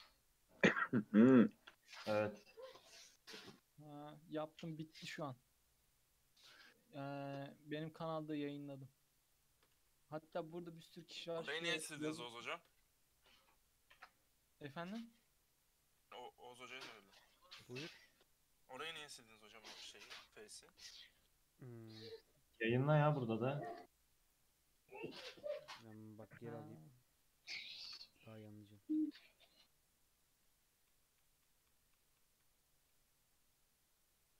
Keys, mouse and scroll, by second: 0.0-2.5 middle drag, 2.5 1, 3.0 click, 5.1 shift+click, 5.7 shift+click, 7.9 click, 8.6 shift+click, 9.3 shift+click, 9.9 f, 10.4-11.3 middle drag, 11.3 2, 12.0 click, 12.5 shift+click, 12.9 f, 14.0 Tab, 14.8 alt+z, 16.0 alt+z, 16.5 alt+z, 16.9-17.3 scroll down 2, 24.3 click, 24.5-25.0 middle drag, 25.0 click, 25.2 middle drag, 25.5 scroll up 1, 25.7 ctrl+z, 26.2 ctrl+middle click, 26.8-27.3 scroll down 2, 27.3 ctrl+z, 27.9 ctrl+z, 28.1 ctrl+z, 28.4 ctrl+z, 28.9 ctrl+z, 29.3 ctrl+z, 29.8 ctrl+z, 30.6 ctrl+z, 31.0 ctrl+z, 31.3 ctrl+z, 31.6 ctrl+z, 31.8 ctrl+z, 32.1 ctrl+z, 32.3 ctrl+z, 33.0 ctrl+z, 33.5 ctrl+z.